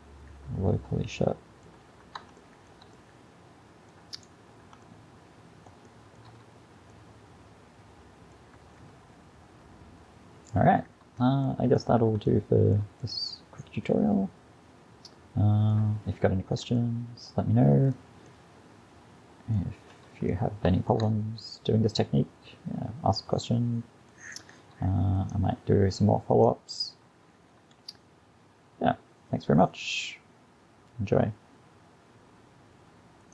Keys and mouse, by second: 3.5-6.1 middle drag, 11.7-14.9 middle drag, 16.3-17.9 middle drag, 17.9-18.8 drag, 18.8-19.9 middle drag, 21.8-23.0 middle drag, 25.2-27.0 drag.